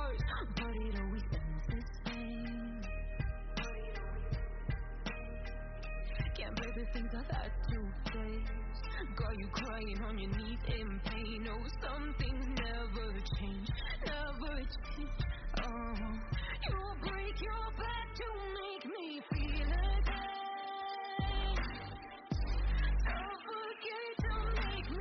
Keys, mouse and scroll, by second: 24.2 F10.